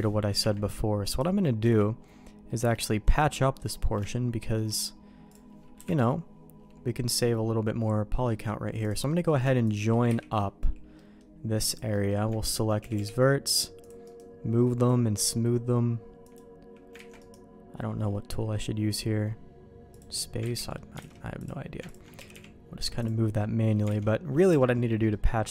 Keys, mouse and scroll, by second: 0.4 Tab, 1.1 click, 1.6 Tab, 2.4 middle click, 2.8 middle click, 3.1 middle click, 4.0 middle click, 5.2 click, 5.7 KP_Decimal, 7.8 middle click, 8.8 click, 9.0 middle click, 9.6 shift+click, 10.0 j, 10.9 middle click, 11.7 click, 11.9 middle click, 12.5 ctrl+click, 12.8 g, 14.1-16.3 right drag, 16.9 ctrl+z, 17.2-19.9 right drag, 20.4 ctrl+z, 20.5 middle click, 21.0 alt+a, 21.3 click, 22.1 g, 23.3 middle click, 23.9 alt+a, 24.0 middle click, 24.6 middle click, 25.1 middle click.